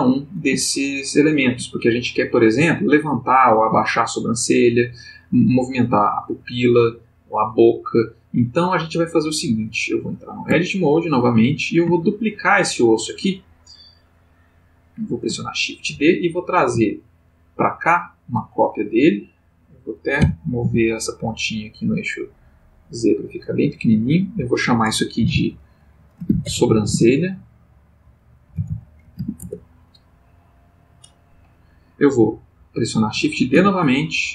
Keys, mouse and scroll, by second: 0.6-1.5 shift+middle drag, 10.5 Tab, 11.9 shift+middle click, 15.9 shift+d, 18.1 ctrl+click, 18.8 click, 20.2 g, 20.6 z, 22.8 click, 23.5 click, 25.2 F2, 26.2-26.9 typing, 28.0-29.1 typing, 29.4 Return, 33.5 shift+d.